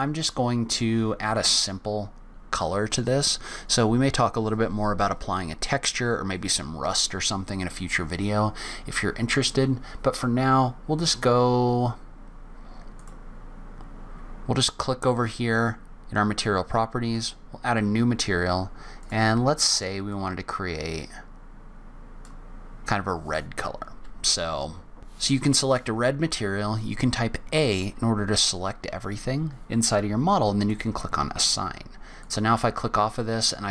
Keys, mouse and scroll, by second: 7.7-8.6 scroll up 1, 13.0 click, 17.1 click, 19.0 click, 25.0-27.5 scroll down 1, 30.6 click, 32.2 click.